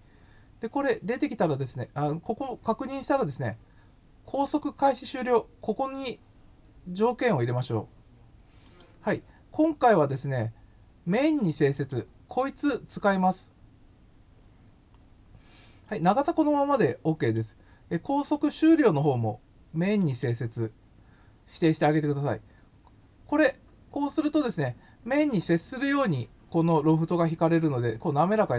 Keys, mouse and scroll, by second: 4.8 click, 7.1 scroll up 1, 8.6 click, 11.7 click, 17.1 click, 20.0 click.